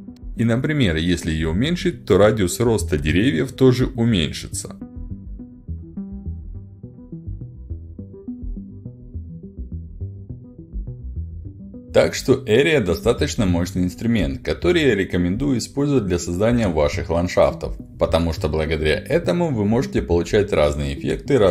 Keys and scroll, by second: 7.8-19.8 typing.